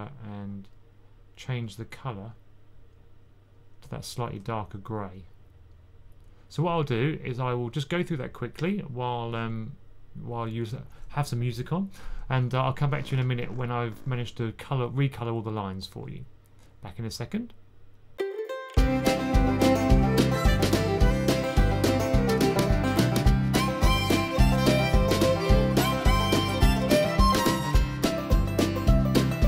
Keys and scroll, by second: 18.4 super+s, 20.8-22.5 typing, 26.0-27.7 typing.